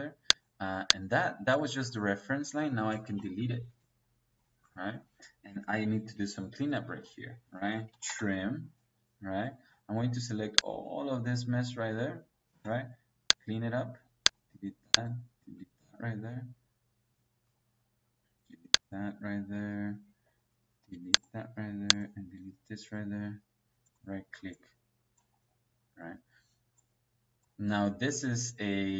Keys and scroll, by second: 3.0 Delete, 4.8 Escape, 7.4-8.1 typing, 12.4 space.